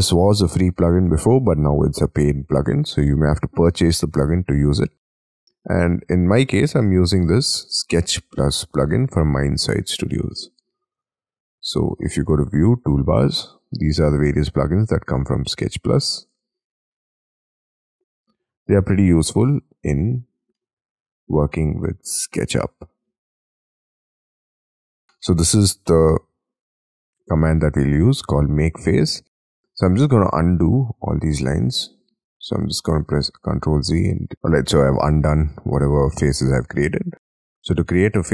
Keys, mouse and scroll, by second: 34.3 middle click, 37.1-37.5 scroll down 8, 37.5 double click.